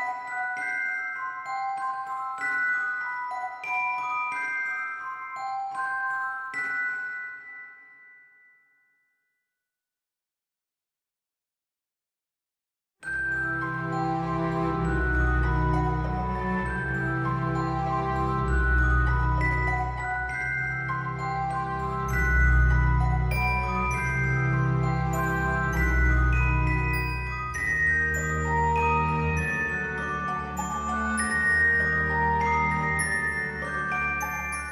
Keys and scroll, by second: 27.4 ctrl+z.